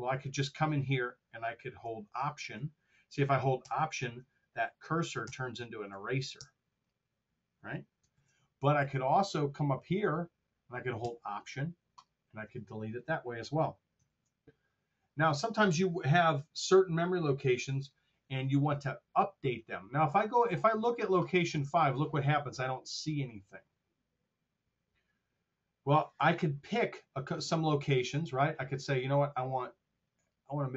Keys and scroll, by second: 8.1 super+z, 13.9 super+z.